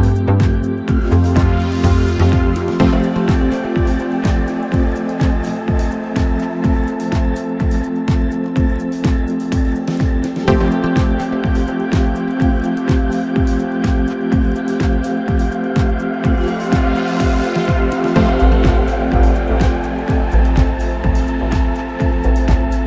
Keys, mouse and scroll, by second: 0.2 s, 3.5 scroll down 2, 3.7-6.8 middle drag, 6.8 click, 7.3-9.7 middle drag, 9.7 scroll down 3, 9.9-11.5 middle drag, 11.5 KP_1, 12.3-12.6 scroll up 2, 12.6-13.5 scroll down 1, 13.5 drag, 14.6-17.7 drag, 17.9-22.8 drag.